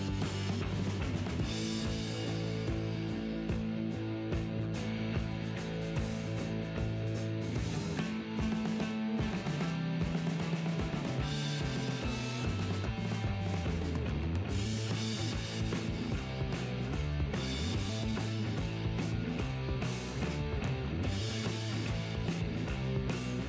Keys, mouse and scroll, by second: 0.4 middle click, 0.9-6.8 right drag, 3.1 g, 3.4 middle click, 4.5 g, 5.1 g, 8.5-12.6 right drag, 8.7 g, 10.3 g, 11.2-21.0 middle drag, 12.0 g, 12.6 click, 18.0-20.2 right drag, 19.6 g, 21.0 g, 22.6 g.